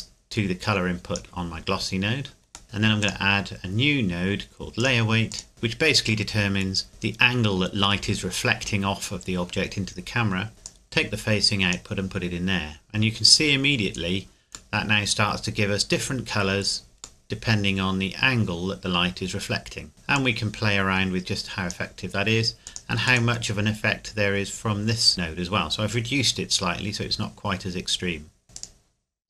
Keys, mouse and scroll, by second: 2.6 middle click, 3.0 click, 10.6 click, 14.7 middle click, 20.1 click, 25.1 middle click, 28.4 scroll down 1, 28.5 right click, 29.1 scroll down 1.